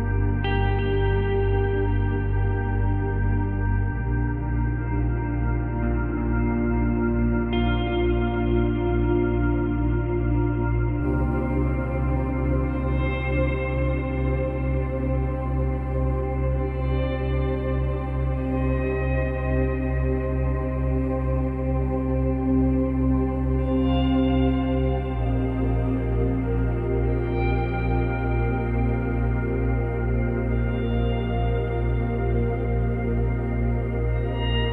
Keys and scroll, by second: 3.0 space, 9.8 space, 29.8 Delete.